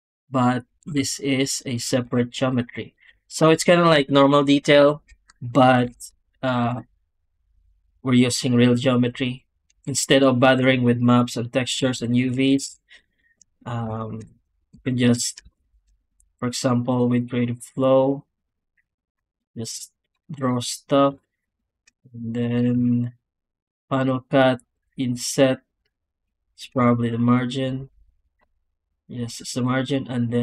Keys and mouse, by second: 0.0 click, 0.7 g, 1.5 click, 1.9 z, 3.4 click, 5.7 alt+a, 6.1 shift+click, 11.3 click, 11.7 Tab, 12.5 alt+a, 13.4 click, 14.6 3, 14.8 click, 15.6 ctrl+shift+x, 17.4 click, 18.0 click, 18.4 click, 18.8 alt+a, 19.2 ctrl+shift+x, 20.3 click, 21.0 space, 22.3 Tab, 22.6 w.